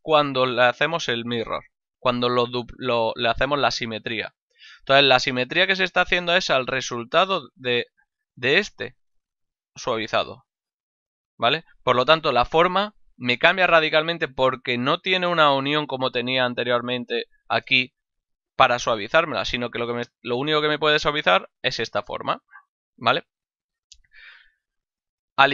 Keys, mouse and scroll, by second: 1.3 click, 5.5 middle click, 5.9 shift+middle click, 8.1 click, 11.7 click, 21.1 click, 23.7 click.